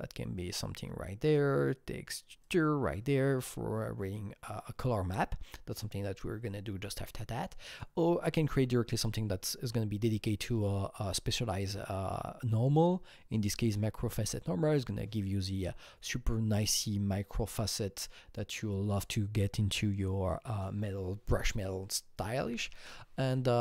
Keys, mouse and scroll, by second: 2.4 click, 7.7-10.1 click.